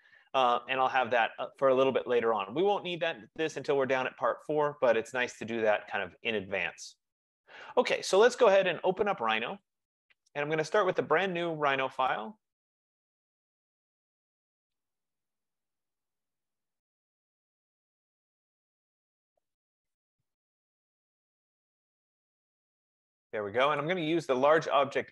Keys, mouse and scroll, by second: 1.3 click, 4.9 middle click, 10.1 click, 11.7 click, 12.4 click, 12.6 click, 24.0 click, 24.7 click.